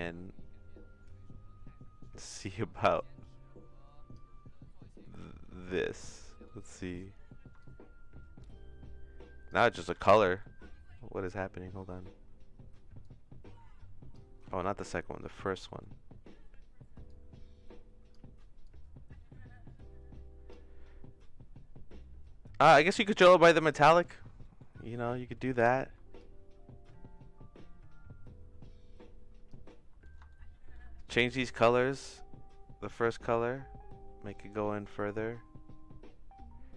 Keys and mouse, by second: 3.1-4.1 shift+drag, 5.0 middle click, 5.7 middle click, 6.2 middle click, 7.6-9.5 shift+drag, 9.8 ctrl+z, 10.4 middle click, 11.0 middle click, 13.0-14.1 drag, 14.6 middle click, 15.7 middle click, 17.1-18.2 drag, 18.7-20.5 drag, 22.6-23.8 drag, 24.4 middle click, 24.9 middle click, 26.2-29.5 shift+drag, 30.3 shift+middle click, 30.9 middle click, 33.0-36.7 shift+drag.